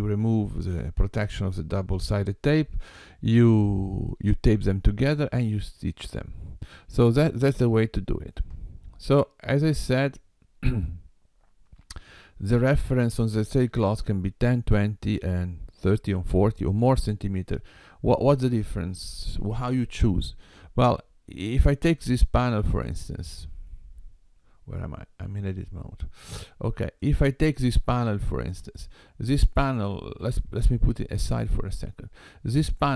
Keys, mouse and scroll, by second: 20.2-20.6 scroll up 2, 22.1 click, 22.6 click, 25.3 Tab, 27.0 click, 30.3 g.